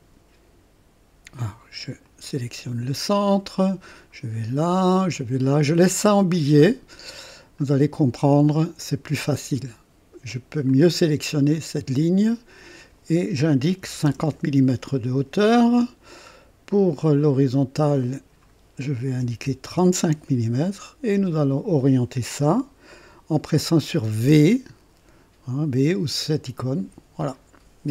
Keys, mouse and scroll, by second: 2.0 click, 3.8 click, 5.1 click, 6.4-7.7 right drag, 8.4 right click, 10.6 click, 12.3 click, 13.8 KP_5, 14.2 KP_0, 14.4 Return, 16.9 click, 18.0 click, 19.2 KP_3, 19.6 KP_5, 19.9 Return, 21.5 click, 24.3 v.